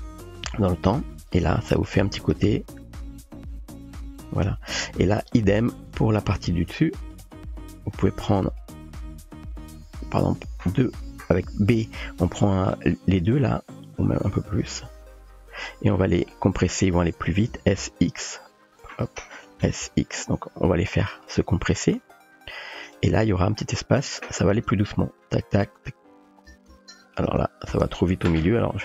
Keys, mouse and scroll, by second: 1.0-2.3 typing, 1.4 click, 1.9 click, 4.7 typing, 5.1 click, 7.1 click, 8.6 click, 8.7 typing, 9.7-10.5 typing, 9.8-10.6 drag, 11.6-12.9 typing, 12.9 middle click, 14.0-14.7 typing, 14.0 click, 16.0 click, 17.6 s, 19.6 s, 22.0 g, 24.1 click, 24.6 space, 26.5 space, 27.3 space, 27.7 space, 28.4 g.